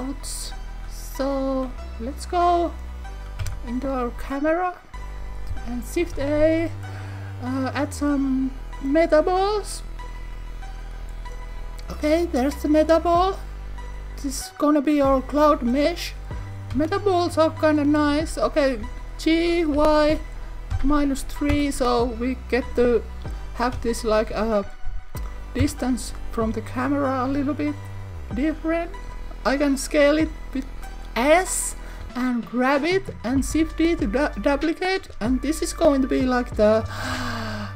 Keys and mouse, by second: 3.4 KP_0, 6.0 shift+a, 14.5 click, 16.6 KP_1, 17.3 KP_3, 18.8 g, 19.7 y, 20.7 -, 20.8 3, 21.5 Return, 23.7 KP_1, 25.6 KP_0, 30.1 click, 32.0 g, 32.7 click, 33.5 shift+d, 34.6 click, 35.1 s, 36.3 click, 37.0 shift+d.